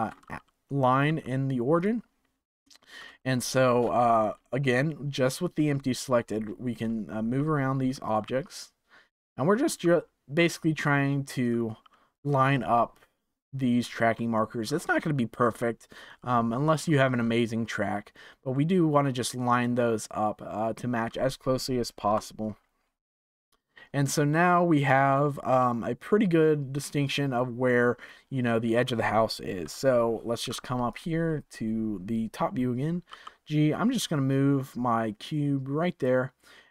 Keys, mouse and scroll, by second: 1.0 g, 2.5 scroll up 4, 3.1-5.3 shift+middle drag, 5.3-5.7 scroll down 5, 6.2-6.8 scroll up 6, 7.3 r, 8.2 g, 10.2 r, 11.7 g, 14.6-15.9 scroll up 2, 15.9 g, 17.0-18.5 scroll down 10, 18.5-21.5 middle drag, 22.0 KP_0, 27.1-29.6 middle drag, 29.6 KP_7, 30.8 click, 33.0 g.